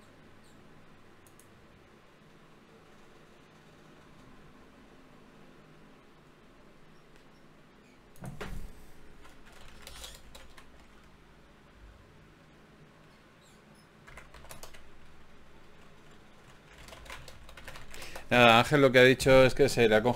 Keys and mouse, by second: 4.4-6.7 drag, 5.0 o, 7.1-8.9 drag, 9.7 g, 12.5 g, 19.7-20.1 right drag.